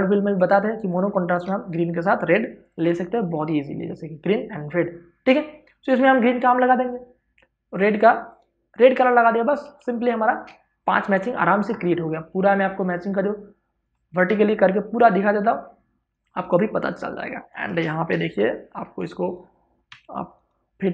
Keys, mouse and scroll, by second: 1.1 ctrl+o, 2.4 click, 5.9 click, 9.4 space, 9.6 ctrl+click, 16.3 space, 16.6 ctrl+click, 19.6 z, 20.0 click, 20.1 right click.